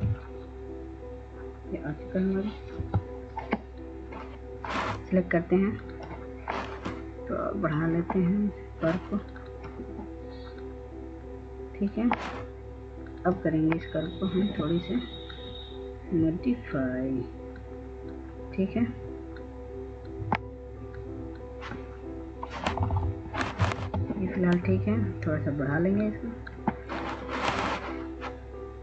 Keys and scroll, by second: 2.9 F2, 23.1 Up, 23.8 ctrl+space.